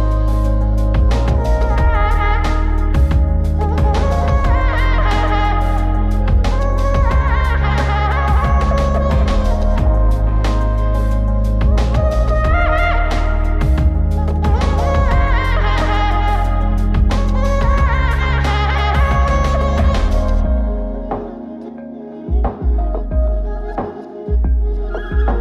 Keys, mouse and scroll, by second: 5.0 click, 6.2-7.1 drag, 7.9 shift+d, 9.5 middle click, 9.9 click, 10.5 click, 11.3-13.5 drag, 14.4 middle click, 15.1-16.0 scroll up 2, 16.0-17.6 drag, 17.9-18.4 scroll down 5, 18.4 middle click, 19.7 click, 21.3-22.9 drag, 23.2 scroll up 1, 23.5 middle click, 24.0 click, 25.1 click.